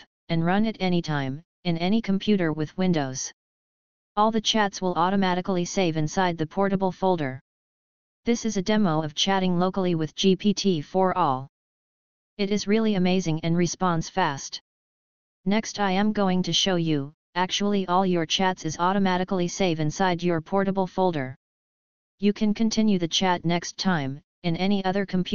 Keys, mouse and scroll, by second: 2.4-7.1 typing, 7.5 Return, 15.7 click, 16.5 click, 17.1 click, 17.3 click, 18.6 scroll down 1, 19.8-20.4 drag, 19.8 scroll down 1, 21.2 click, 23.0 click, 24.1 click, 24.6 click.